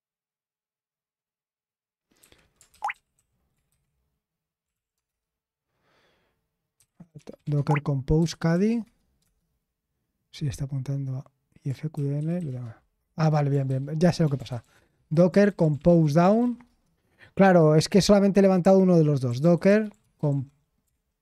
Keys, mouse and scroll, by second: 2.6-8.7 typing, 3.7 ctrl+c, 8.8 Tab, 9.2 Return, 11.9-20.8 typing.